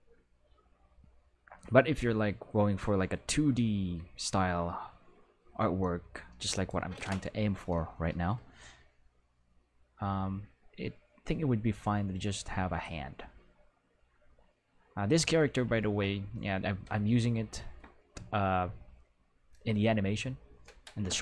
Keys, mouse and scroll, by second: 6.5 right click, 8.3 middle click, 19.5 middle drag, 21.0 Home.